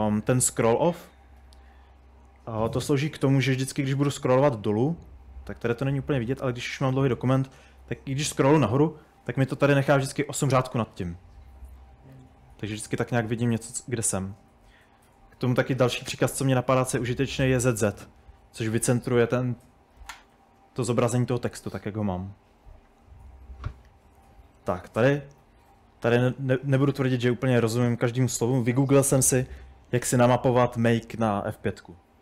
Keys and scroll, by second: 0.0-2.6 typing, 2.8 Escape, 3.0 Escape, 4.1-4.8 typing, 6.0-8.2 typing, 12.4-19.1 typing, 23.9-27.0 typing, 30.1 typing.